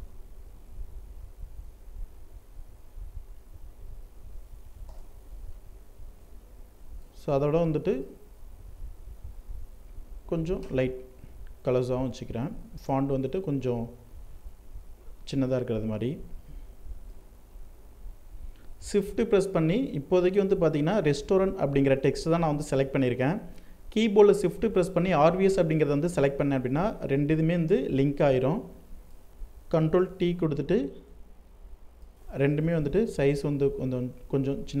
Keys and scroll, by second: 4.0 ctrl+Return, 29.0 ctrl+t.